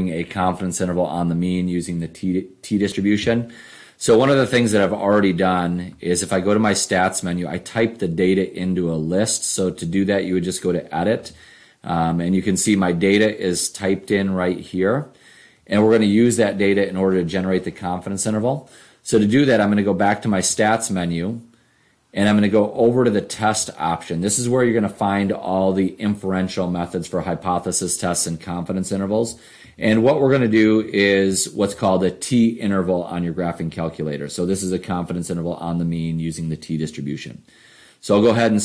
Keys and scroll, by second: 11.2 Return, 22.7 Right, 23.6 Right, 26.3 Down, 29.2 Down, 29.7 Down, 30.2 Down, 30.7 Down, 31.3 Down, 31.9 Down.